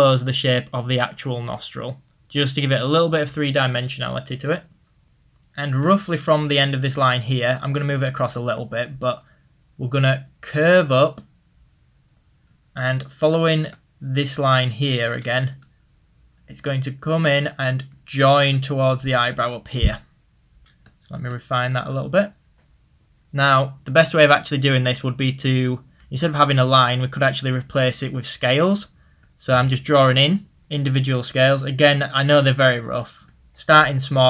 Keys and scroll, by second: 6.9 ctrl+z, 12.9 ctrl+z.